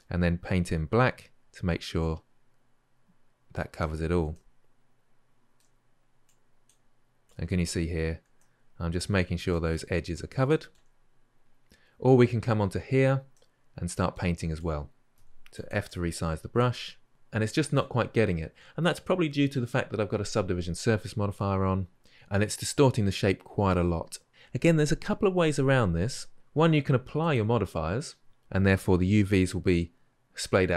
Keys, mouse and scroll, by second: 5.7-6.0 shift+middle drag, 6.0-8.6 drag, 8.6-14.4 shift+middle drag, 14.4-15.0 drag, 15.0 f, 15.7-17.0 drag, 17.0 middle drag, 17.1-19.7 drag.